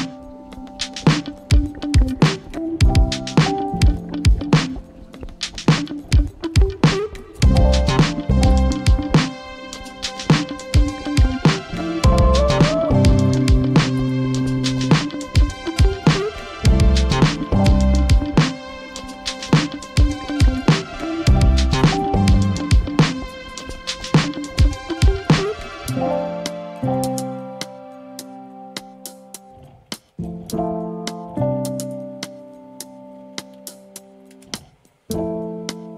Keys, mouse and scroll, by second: 0.9-9.5 typing, 10.7-35.8 typing.